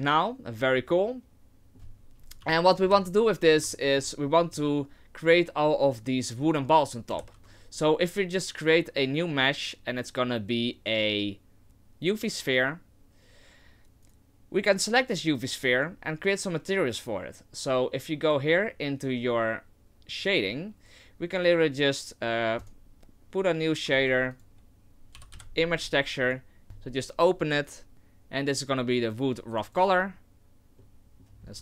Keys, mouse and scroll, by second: 2.4 KP_3, 2.8 KP_1, 3.5 scroll down 3, 3.8 shift+middle click, 4.2 scroll up 3, 7.2 shift+a, 14.0 right click.